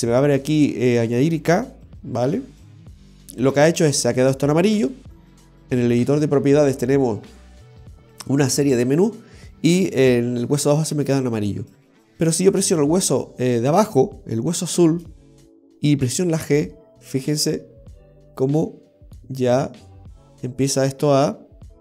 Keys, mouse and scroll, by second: 12.5 right click, 14.5 r, 16.2 g.